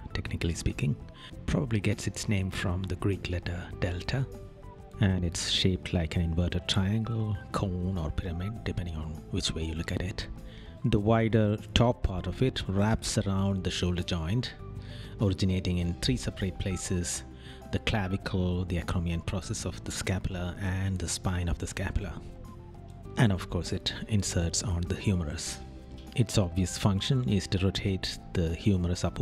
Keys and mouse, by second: 2.5 right click, 6.4 right click, 11.3 right click, 15.6 right click, 20.3 right click, 21.2 right click, 22.4 right click, 26.2 right click, 27.1 right click.